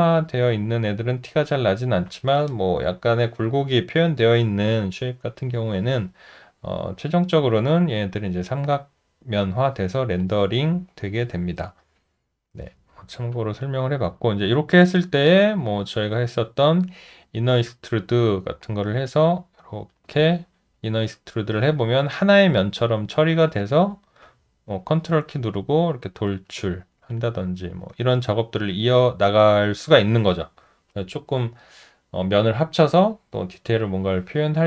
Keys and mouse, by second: 7.4 alt+click, 13.3 alt+click, 23.6 alt+click, 25.3 ctrl+click, 27.1 alt+click.